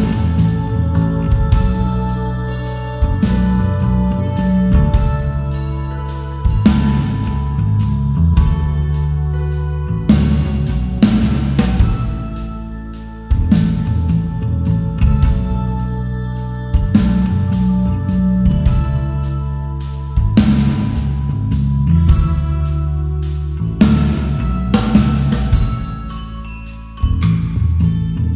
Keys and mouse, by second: 1.6 click, 3.3 right click, 6.0 click, 7.8 right click, 11.4 click, 12.6-13.8 right drag, 15.7 Tab, 16.5 click, 19.2 Tab, 22.3 click, 23.7-24.9 right drag, 25.7 Tab, 27.8 click.